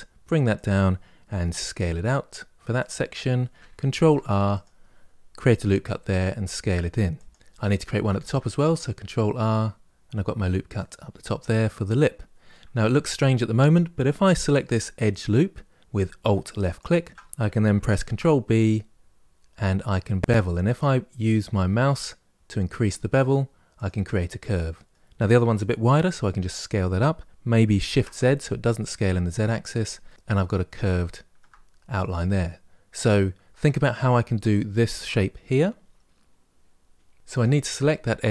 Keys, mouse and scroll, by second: 1.2 s, 3.7 ctrl+r, 5.4 s, 7.4 middle click, 8.0 ctrl+r, 12.2-16.5 middle drag, 16.5 alt+click, 17.8 ctrl+b, 24.0-25.9 middle drag, 25.9 s, 29.8-33.8 middle drag, 37.1 alt+click.